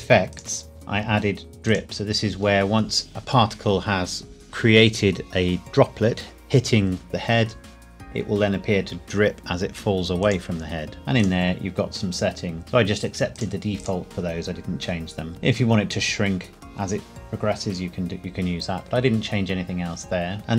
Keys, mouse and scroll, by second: 0.3 click, 0.7-1.7 scroll down 1, 1.7 click, 10.2 click, 11.2 click, 11.7-12.7 scroll down 1, 13.3 click, 15.3-16.1 scroll down 1, 20.4-20.5 scroll down 1.